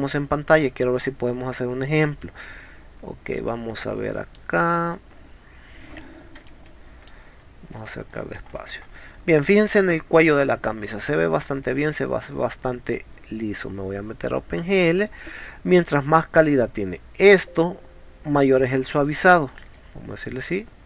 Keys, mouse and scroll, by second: 0.2-1.3 scroll up 3, 2.2-3.3 middle drag, 4.6-6.1 scroll down 1, 6.5 shift+middle click, 7.8-8.5 shift+scroll up 4, 8.6 middle click, 8.9 middle click, 11.6 click, 12.9 click, 14.4 click, 15.3 click, 17.2 click, 19.7 click.